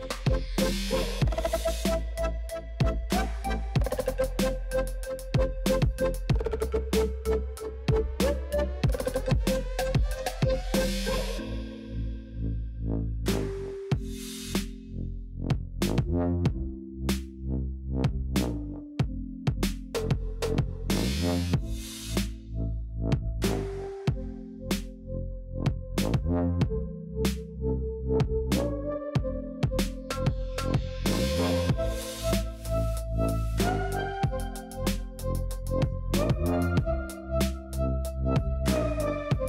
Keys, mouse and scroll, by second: 0.3 alt+shift+Left, 0.5 middle click, 0.8-1.1 scroll up 1, 1.1 shift+Left, 1.3 shift+Left, 1.5 shift+Left, 1.7 shift+Left, 1.8-2.9 shift+middle drag, 3.1-3.6 middle drag, 4.0 middle click, 4.3 scroll up 2, 4.7 shift+middle click, 5.1 shift+click, 5.3 shift+click, 5.5 shift+click, 5.8 shift+click, 5.9 shift+click, 6.0 shift+middle click, 6.7 shift+click, 7.0 shift+click, 7.1 middle click, 7.3-7.9 scroll down 2, 7.9 click, 8.4 click, 10.4 click, 10.6-11.3 middle drag, 11.3-11.8 scroll up 3, 11.4 shift+middle click, 11.8-13.0 middle drag, 13.0 scroll up 2, 13.2 middle click, 13.4 scroll down 3, 13.5-13.9 shift+middle drag, 13.9 click, 14.2 ctrl+KP_Add, 14.4 ctrl+KP_Add, 15.0 click, 15.4 click, 15.5 middle click, 16.2-16.9 scroll down 2, 16.9 click, 17.3 l, 17.9 l, 18.0 middle click, 18.9-19.2 l, 19.4 scroll down 4, 19.6-20.7 middle drag, 20.7-21.1 scroll up 3, 21.1 shift+middle click, 21.8 l, 22.1 l, 22.5 l, 22.8 l, 23.0 scroll down 2, 23.1-24.4 middle drag, 24.4 click, 24.9 scroll down 2, 25.1-25.7 middle drag, 25.7 scroll up 3, 25.9 shift+middle click, 26.6 alt+click, 26.8-27.8 middle drag, 27.8-28.3 scroll down 1, 28.3 click, 28.7 click, 29.1 scroll down 2, 29.3-30.9 shift+middle drag, 30.9-31.9 scroll up 4, 31.1 middle click, 32.5 click, 32.9-33.5 drag, 34.4 scroll down 2, 34.6-35.3 shift+middle drag, 35.3 click, 35.5 scroll down 2, 35.8-36.5 shift+middle drag, 36.5-37.3 scroll up 1, 37.3 click, 39.1 Tab.